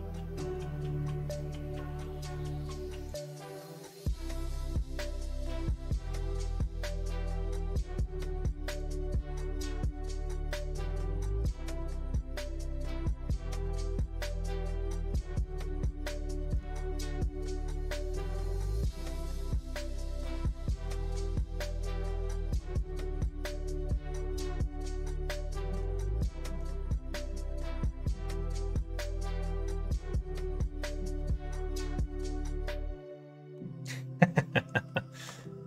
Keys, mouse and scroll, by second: 3.0 click, 8.7 click, 10.2-13.9 drag, 14.5-16.5 middle drag, 17.0 middle click, 17.5-18.8 middle drag, 19.2 middle click, 21.2-25.6 middle drag, 26.1 middle click, 26.7 shift+middle click, 27.2 middle click, 28.0 middle click, 29.7-30.9 middle drag, 31.6-33.5 middle drag, 34.1 middle click, 34.8 middle click.